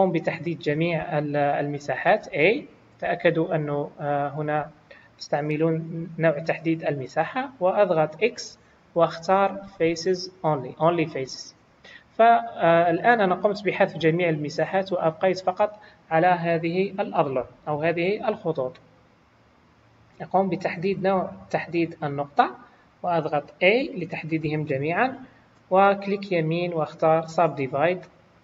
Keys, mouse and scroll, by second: 2.0 a, 8.2 x, 21.6 click, 23.8 a, 26.3 right click.